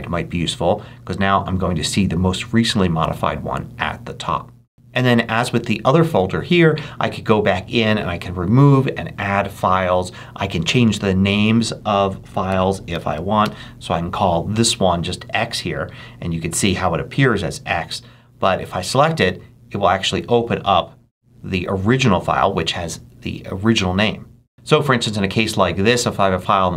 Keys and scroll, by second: 12.4 Return, 12.9 shift+x, 13.3 shift+Return, 14.0 Return.